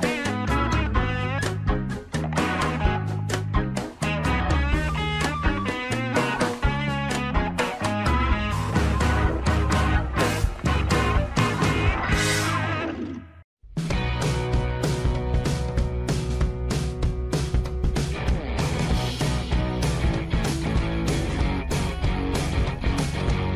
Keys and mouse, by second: 0.6 shift+middle click, 0.9-2.5 middle drag, 2.9 shift+middle click, 3.6 Tab, 4.2 shift+middle click, 4.6 middle click, 5.6 shift+middle click, 6.6 ctrl+r, 10.2 shift+middle click, 10.4 middle click, 11.0 shift+middle click, 11.4 Tab, 11.9 middle click, 12.2 middle click, 13.5 click, 14.4 shift+middle click, 14.8-17.3 middle drag, 17.5 Tab, 18.4 Tab, 19.1 shift+middle click, 19.6-20.7 middle drag, 20.8 Tab, 22.5-23.5 middle drag.